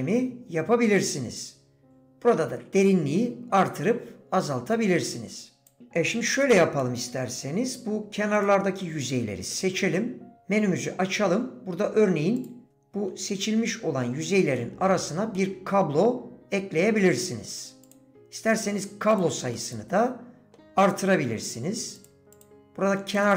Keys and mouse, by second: 1.0 click, 2.0-5.8 drag, 6.8 middle click, 8.8 middle click, 12.7 middle click, 14.6 middle click, 15.3-16.7 middle drag, 17.8 click, 19.2 click, 19.5-20.5 middle drag, 22.3 click, 23.2 click.